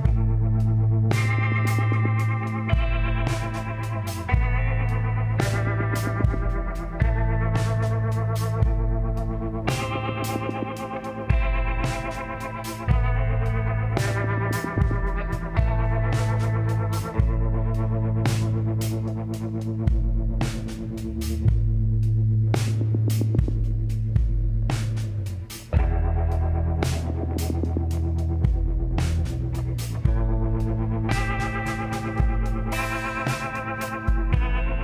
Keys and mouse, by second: 0.2 click, 2.2 b, 4.0-6.6 drag, 8.2 middle click, 9.2 click, 9.3 middle click, 9.7 click, 9.9 click, 10.5 middle click, 11.1 b, 14.2-15.4 middle drag, 15.4-17.0 drag, 18.0-19.8 middle drag, 19.8 g, 22.1 click, 22.9 middle click, 24.8-26.6 drag, 25.3 b, 27.9 b, 29.3-31.3 drag, 33.4 z, 33.6-34.8 middle drag.